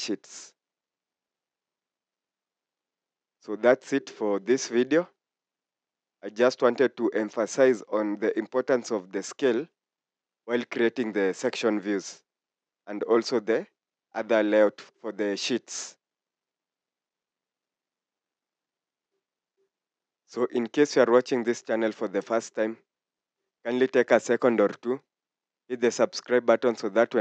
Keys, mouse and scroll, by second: 11.7 scroll down 1, 23.6 scroll down 1.